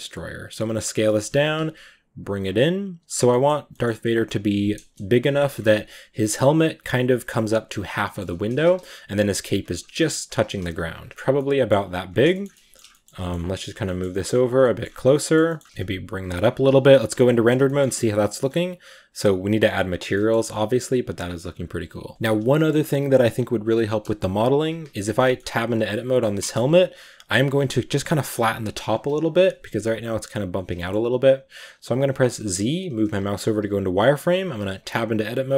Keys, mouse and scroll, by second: 0.9 shift+middle click, 1.2 g, 2.6 s, 3.0 scroll up 3, 3.1 middle click, 3.5 g, 4.6 KP_0, 5.2 shift+middle click, 5.4-6.2 scroll up 4, 6.2-7.8 scroll down 2, 7.9 shift+middle drag, 8.0 scroll up 1, 8.2 g, 9.8 s, 10.4 g, 10.9 scroll down 2, 11.1 g, 11.2 middle click, 11.7-12.2 scroll up 9, 12.2 shift+middle click, 12.9 scroll up 1, 13.0 g, 13.7 shift+middle click, 13.9 g, 14.5 middle click, 14.7 scroll up 1, 15.0 middle click, 15.3 g, 15.9 g, 16.3-16.6 scroll down 6, 16.8 z, 17.0 click, 17.5 shift+middle drag, 17.6-18.6 scroll up 10, 20.0 shift+middle click, 20.2 scroll up 2, 20.5 right drag, 21.2-22.1 scroll up 1, 22.1-22.6 shift+middle drag, 22.6 scroll up 1, 22.7 scroll down 1, 24.4 KP_Decimal, 25.1-25.5 middle drag, 25.5 Tab, 25.5-28.8 middle drag, 28.8 KP_1, 30.6-33.0 shift+middle drag, 33.0 z, 34.5 Tab, 34.7 Tab.